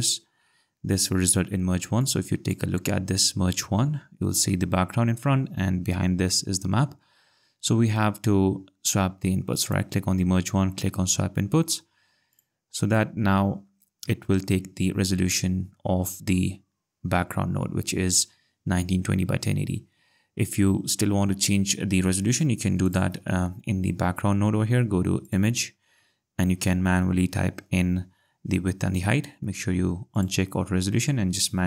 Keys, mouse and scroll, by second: 2.0 click, 9.6 right click, 12.3 click, 14.4 ctrl+scroll, 17.1 scroll, 22.9 click, 25.2 click, 30.1 click.